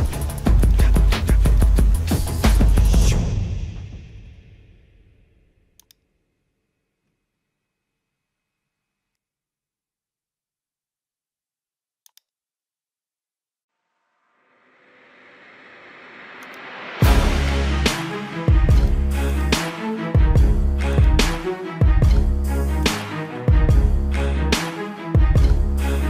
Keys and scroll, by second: 0.3 ctrl+-.